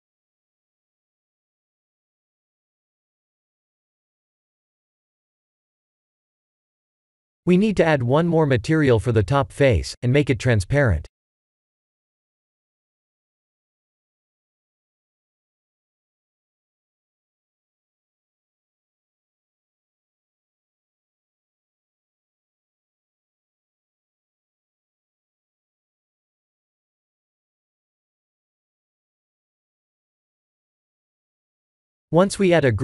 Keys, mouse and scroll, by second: 0.5 click, 1.5 click, 5.7-6.6 middle drag, 6.9-7.3 shift+middle drag, 7.9-8.5 middle drag, 8.6 Tab, 9.0 3, 9.2 click, 11.6 click, 15.8 click, 19.6 click, 21.8 click, 23.5-24.1 middle drag, 24.5 Tab, 25.4 shift+middle drag, 25.8-28.9 middle drag, 29.8 click.